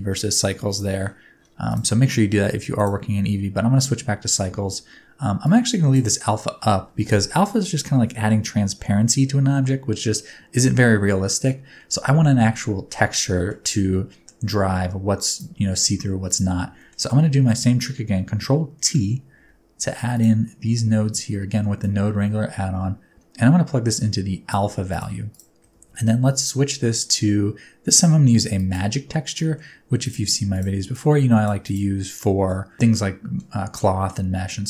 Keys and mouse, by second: 0.7 middle click, 1.6-3.1 middle drag, 5.4-5.9 middle drag, 10.9 middle click, 13.1 middle click, 13.8 middle click, 16.2 click, 16.8 middle click, 17.5 middle click, 18.7 ctrl+t, 19.4 g, 20.5 middle click, 21.8-24.5 drag, 25.3 click, 25.7 shift+s, 29.4 middle click, 30.0 drag, 30.5 click, 30.9-31.4 drag, 31.6 click, 32.2 middle click, 32.9 middle click.